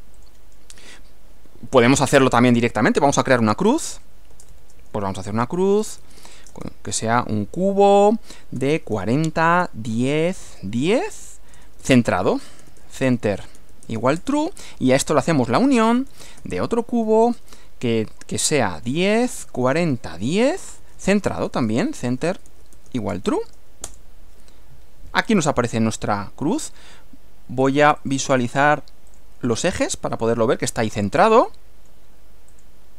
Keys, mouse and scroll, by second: 0.2 click, 1.5-2.4 typing, 3.7 o, 4.0 s, 4.4 space, 4.6 shift+0, 5.6-6.8 typing, 8.4-17.3 typing, 18.5-23.8 typing, 23.9 Return, 25.2-25.6 scroll down 2, 25.8-26.8 middle drag, 28.0 click, 29.2 click, 29.9-32.1 middle drag, 32.6 click.